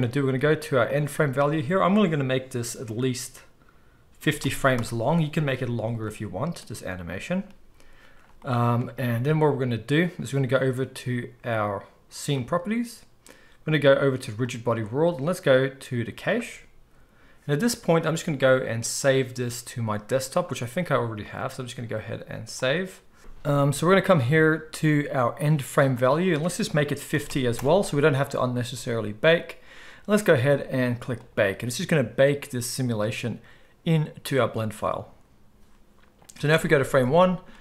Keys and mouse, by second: 0.8-12.3 drag, 12.3-14.4 middle drag, 14.4-37.6 drag, 36.5 shift+Left.